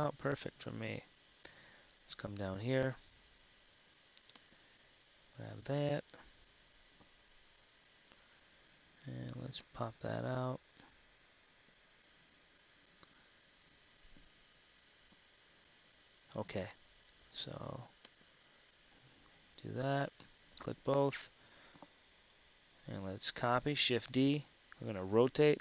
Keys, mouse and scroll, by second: 7.3 z, 8.1 KP_3, 12.0 KP_1, 12.7 z, 20.0 KP_3, 20.9 z, 23.8 shift+d.